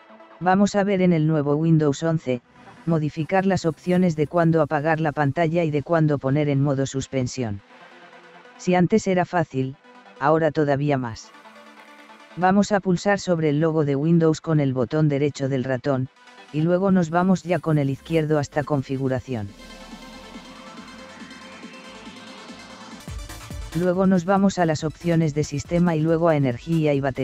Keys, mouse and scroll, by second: 13.3-14.4 right drag, 17.6 click, 22.8 click, 23.4 click, 25.8 drag.